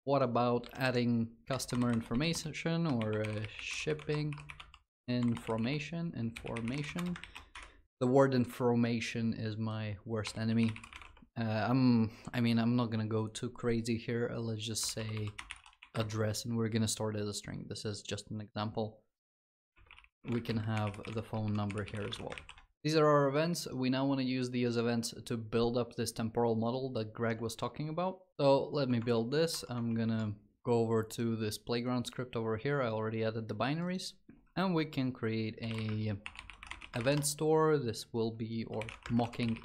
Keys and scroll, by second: 7.0 ctrl+s, 22.2 ctrl+s, 28.3 ctrl+shift+b.